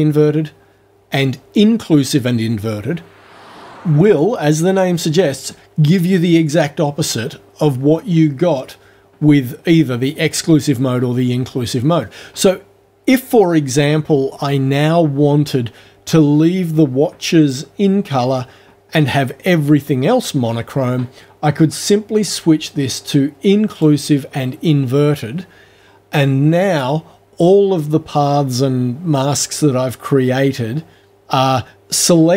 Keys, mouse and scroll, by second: 22.1 click, 23.8 click.